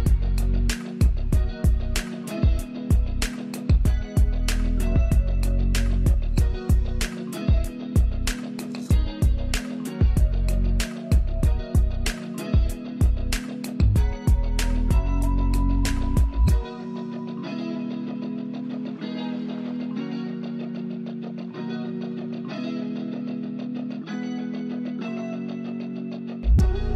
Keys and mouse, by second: 0.6 ctrl+space, 0.9 ctrl+click, 1.2 ctrl+space, 2.9-3.3 typing, 3.9-21.9 drag, 24.3 click, 26.5 click.